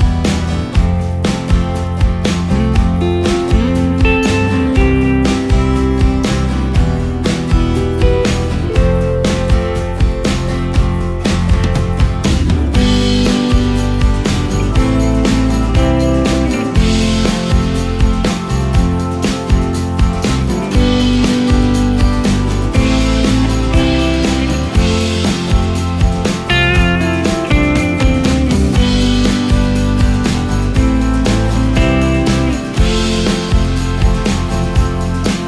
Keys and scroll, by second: 0.5 ctrl+z, 4.8 space, 5.4 ctrl+space, 13.2 Delete, 21.7 space, 23.3 space, 24.1 ctrl+space, 29.2 ctrl+space, 34.4 Delete.